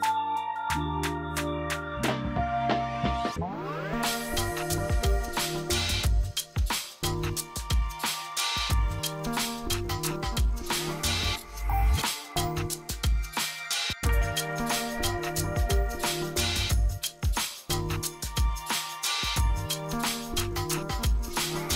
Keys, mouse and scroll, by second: 3.4 click, 5.2-14.0 drag, 14.0 shift+Page_Up, 15.3-16.6 drag, 16.6 shift+Page_Up, 18.2-21.1 drag.